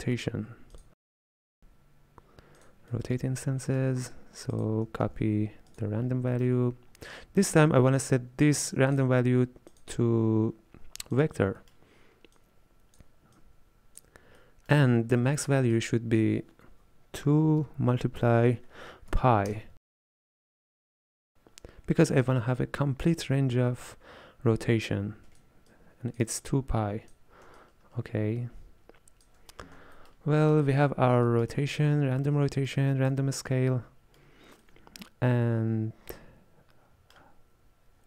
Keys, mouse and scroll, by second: 3.0-4.6 middle drag, 4.6 click, 5.1 shift+d, 6.2 scroll up 3, 6.4-9.0 middle drag, 9.0-11.6 drag, 11.6-12.4 middle drag, 12.4 drag, 13.4 click, 14.4-15.8 middle drag, 15.8-18.9 drag, 22.3-25.3 drag, 25.8-29.8 drag, 29.8 scroll down 1, 30.0-38.0 middle drag.